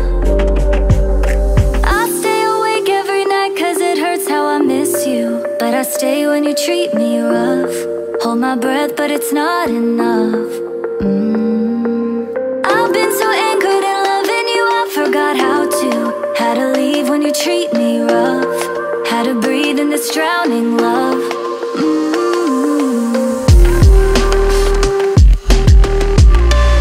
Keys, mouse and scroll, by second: 1.9 ctrl+c, 3.2 ctrl+v, 8.0 ctrl+a, 8.9-10.4 typing, 13.7 ctrl+click, 19.5-20.0 ctrl+scroll down 2, 20.4 ctrl+scroll down 1.